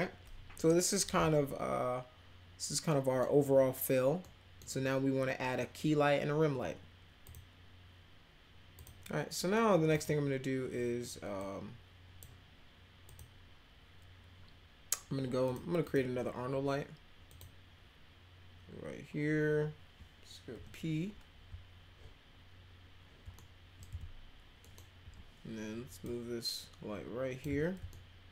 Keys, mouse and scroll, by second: 2.9 middle drag, 4.2-4.6 middle drag, 8.7 click, 9.9 click, 11.4 click, 13.0 click, 15.4 click, 15.8 click, 17.3 click, 20.5 p, 23.4 alt+middle click, 24.6 middle click, 25.0 w, 26.0-27.4 drag, 27.9 alt+middle click.